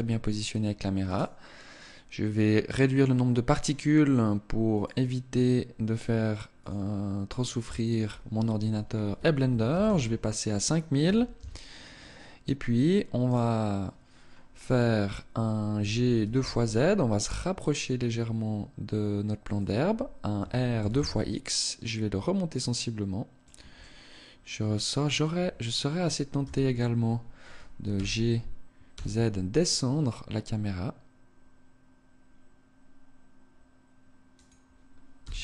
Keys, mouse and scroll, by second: 1.1 right click, 2.9 click, 4.8 click, 6.7 click, 7.7 click, 12.9 right click, 15.5 g, 19.3 click, 20.0 r, 23.1 click, 23.4 middle click, 26.0 KP_0, 27.6 g, 34.1 click, 34.9 g.